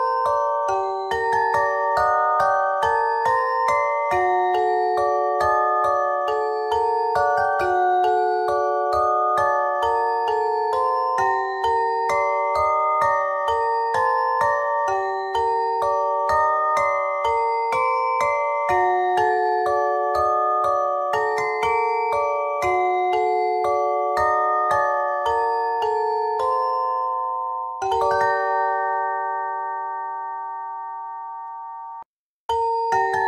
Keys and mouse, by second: 2.0 click, 6.1 s, 8.8 e, 10.3 s, 12.3 click, 12.9 Tab, 13.1 z, 14.9 t, 18.4 KP_3, 19.0 Tab, 19.8 ctrl+Tab, 24.8 c, 26.1 z, 26.7 ctrl+Tab, 31.2 click, 32.0-33.2 drag.